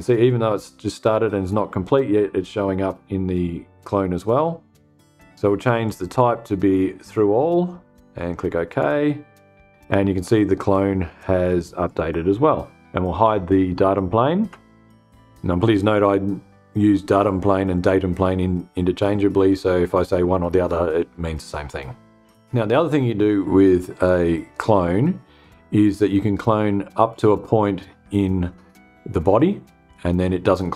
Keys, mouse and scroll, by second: 5.3 click, 6.5 click, 8.1 click, 11.3 click, 14.0 space.